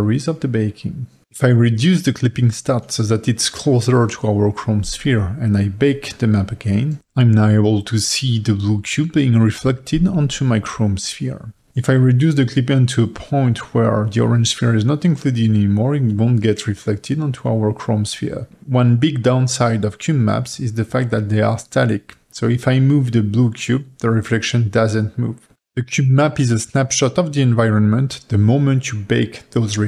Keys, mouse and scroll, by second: 3.2-7.0 drag, 7.0-9.9 middle drag, 9.9-10.3 scroll up 3, 10.3-11.4 middle drag, 11.5-13.1 drag, 14.2 click, 15.2 click, 15.7 scroll up 2, 15.8-17.9 middle drag, 17.9 click, 18.8 g, 25.5 click, 26.0 g, 27.2-27.9 middle drag, 27.9 g.